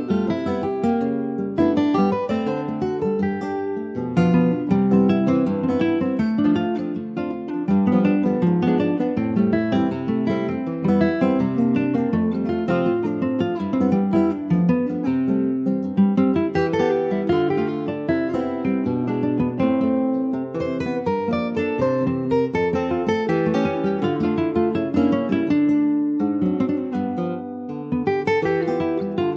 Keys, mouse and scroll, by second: 0.1 alt+shift+click, 0.6 middle click, 1.4 shift+d, 2.6 e, 4.0 ctrl+z, 4.6 alt+s, 6.5 middle click, 7.0 e, 7.8 alt+s, 10.8-12.0 middle drag, 12.0 scroll up 2, 12.4-13.5 middle drag, 13.5 ctrl+r, 14.8 s, 16.9 middle click, 17.3 ctrl+b.